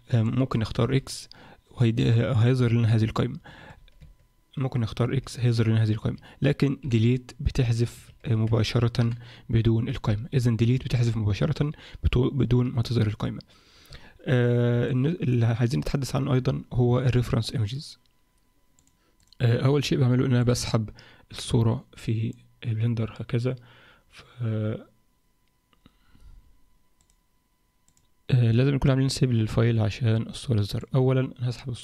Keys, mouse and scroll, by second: 0.9 x, 4.0 Tab, 5.1 x, 6.8 Delete, 8.3 Tab, 9.0 Delete, 14.3-14.9 scroll down 4, 14.9 alt+middle click.